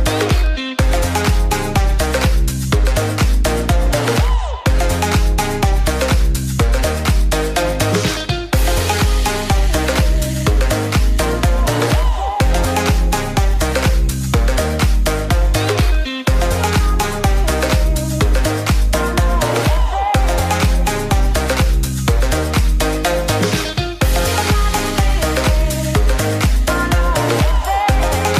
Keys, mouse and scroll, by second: 12.0 click, 15.1-19.6 drag, 23.7 click.